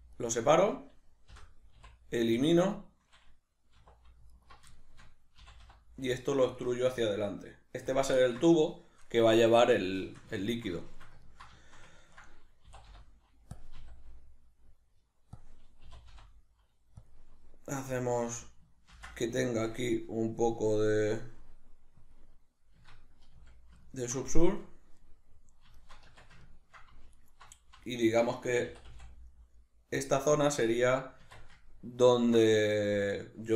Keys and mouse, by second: 0.5 right click, 1.3 l, 4.3 alt+right click, 4.7-8.0 shift+middle drag, 5.4 e, 8.0 click, 8.2-13.6 ctrl+middle drag, 12.7 e, 13.6 click, 13.7 s, 15.4 click, 15.9 e, 17.1 click, 18.0 alt+right click, 18.9 ctrl+b, 22.1 click, 22.8 Tab, 23.9-27.1 ctrl+middle drag, 26.1 Tab, 27.1 alt+right click, 27.8 alt+right click, 28.6 e, 30.0 click, 31.2 Tab, 31.6-33.5 ctrl+middle drag.